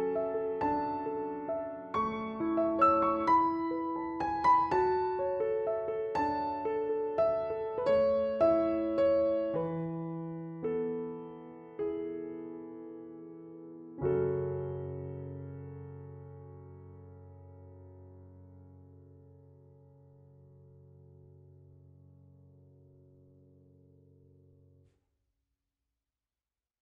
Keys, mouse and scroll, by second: 1.5 Down, 2.9 click, 5.2 Return, 7.0 click, 12.6 click, 19.5 ctrl+t, 20.5 shift+click, 22.5 Return, 23.5 click.